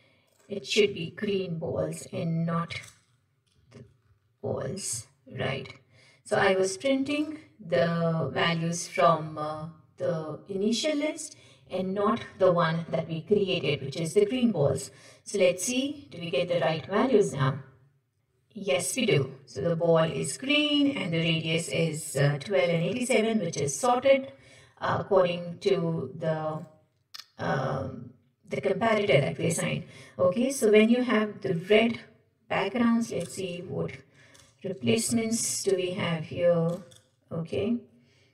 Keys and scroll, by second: 2.8 Return, 3.6 ctrl+shift+Right, 4.2 Delete, 33.3 alt+Return.